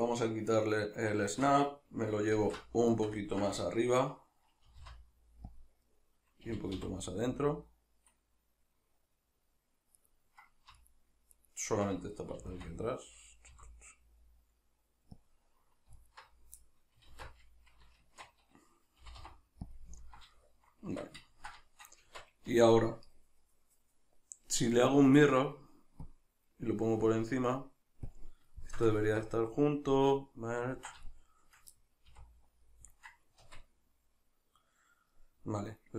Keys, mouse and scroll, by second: 1.2 shift+Tab, 2.4 alt+q, 2.9-5.6 shift+middle drag, 4.7 g, 5.6 click, 5.9-10.1 middle drag, 6.5 g, 10.1 right click, 10.8 alt+right click, 11.3 alt+right click, 12.4 g, 15.3 click, 16.0 alt+right click, 16.6-19.8 middle drag, 17.1 alt+q, 18.0 shift+Tab, 19.0 g, 19.8 click, 20.0-24.8 ctrl+middle drag, 20.9 Tab, 22.1 Tab, 24.8-28.6 drag, 28.6-31.0 ctrl+shift+middle drag, 32.0 a, 32.6 middle click, 33.4 Tab, 33.8 middle click.